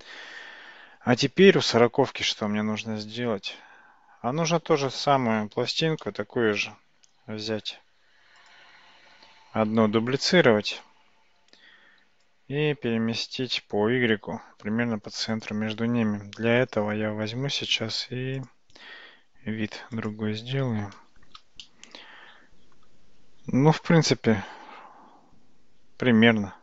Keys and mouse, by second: 6.1-6.6 shift+middle drag, 6.7-7.8 middle drag, 8.4 click, 9.8 shift+d, 12.0 g, 16.4 `, 20.2 `, 21.7-22.8 shift+middle drag.